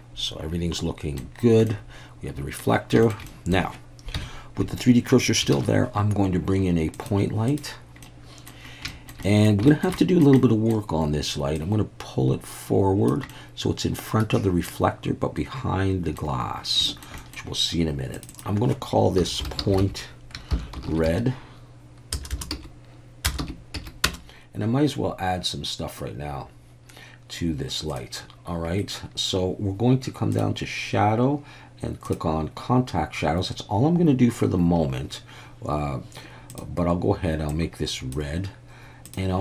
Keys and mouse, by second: 1.7-2.6 middle drag, 3.0 shift+middle click, 3.3 middle click, 4.1 KP_1, 5.5 shift+a, 8.0-8.5 middle drag, 8.9 shift+middle drag, 9.2 middle click, 9.7 shift+middle drag, 10.0 middle drag, 10.4-10.7 middle drag, 11.6-13.1 drag, 13.3-16.2 middle drag, 16.9 shift+middle drag, 17.2 middle click, 18.2-24.9 drag, 22.3 BackSpace, 30.4 click, 32.0 click, 39.1-39.4 drag.